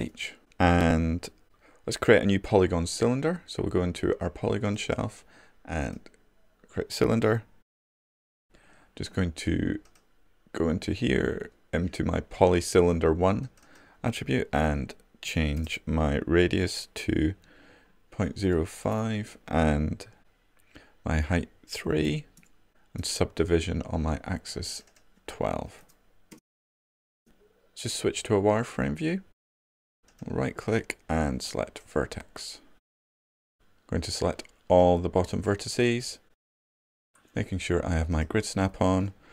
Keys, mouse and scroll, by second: 28.9 4, 31.0-32.7 right drag, 32.7-34.0 drag.